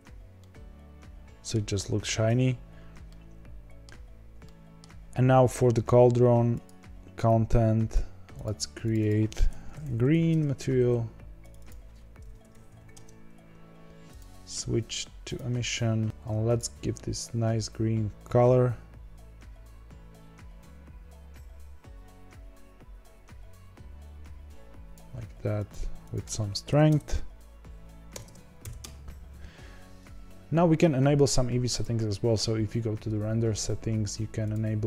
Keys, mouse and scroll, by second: 0.3-1.7 middle drag, 1.7-2.6 scroll up 5, 2.6-3.0 scroll down 2, 3.0-6.6 shift+middle drag, 6.6 click, 8.4 click, 8.9-10.2 drag, 10.2 e, 11.3 click, 11.5-12.9 drag, 12.9 e, 15.0-16.0 drag, 16.0 ctrl+z, 17.2 click, 25.6 click, 28.7 BackSpace, 29.7-30.4 scroll down 2, 30.4-31.5 scroll up 2, 34.4 click.